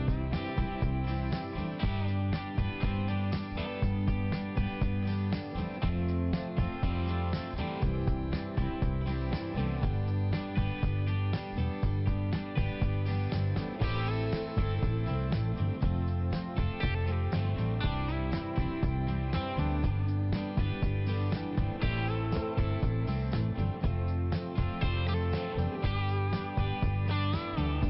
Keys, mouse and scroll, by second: 0.0 click, 0.2 click, 0.7 click, 0.8 click, 1.9 click, 2.8 click, 3.0 click, 3.1 click, 3.3 double click, 3.5 double click, 3.6 double click, 3.7 double click, 3.9 double click, 4.1 double click, 4.3 double click, 4.5 double click, 4.6 double click, 6.1 click, 7.4 click, 7.6 click, 7.9 click, 8.1 click, 8.3 click, 8.7 click, 8.9 click, 9.0 click, 9.4 click, 9.5 click, 9.8 click, 10.1 click, 10.2 click, 10.4 click, 10.5 double click, 10.8 double click, 10.9 double click, 11.2 double click, 11.3 double click, 11.5 double click, 11.7 double click, 14.0 click, 14.6 click, 14.8 click, 15.1 click, 15.7 click, 16.4 click, 16.5 click, 16.7 click, 16.8 double click, 17.2 double click, 19.3 click, 19.7 click, 20.0 click, 20.6 click, 21.1 click, 21.2 click, 21.4 click, 22.1 click, 22.2 click, 22.5 click, 22.7 double click, 23.0 double click, 23.1 double click, 23.3 double click, 23.4 double click, 24.0 double click, 24.0 double click, 24.2 double click, 24.4 double click, 24.6 double click, 24.8 double click, 25.0 double click, 25.2 double click, 25.5 double click, 25.6 double click, 25.7 double click, 26.2 click, 26.3 click, 26.4 click, 26.5 double click, 26.7 double click, 26.9 double click, 27.1 double click, 27.2 double click, 27.5 double click, 27.6 double click.